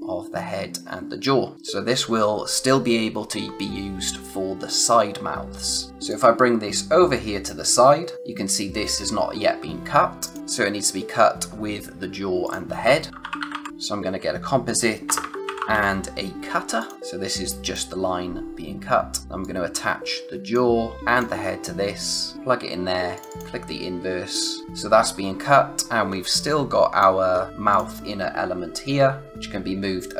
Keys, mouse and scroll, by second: 6.0 click, 10.2 click, 10.4-11.2 scroll down 1, 12.4 click, 12.8-16.2 typing, 13.7 click, 16.7 click, 19.4 click, 25.8 scroll down 1, 26.1 space, 26.3 click, 26.6 space, 27.3-27.7 scroll up 1, 27.7 click.